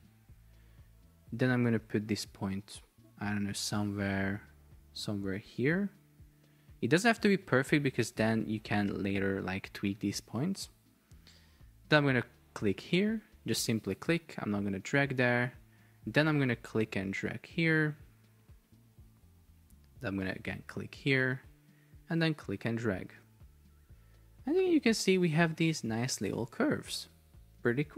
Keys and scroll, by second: 26.6 Escape.